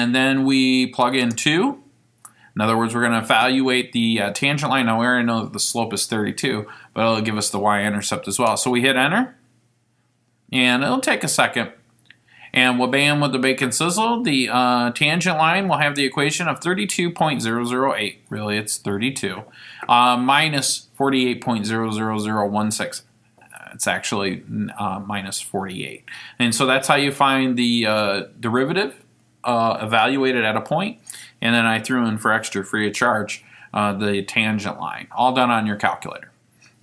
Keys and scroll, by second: 1.3 2, 8.5 Return, 12.1 *, 16.9 *, 18.2 *, 21.1 ×, 21.6 *, 24.9 *, 36.0 *.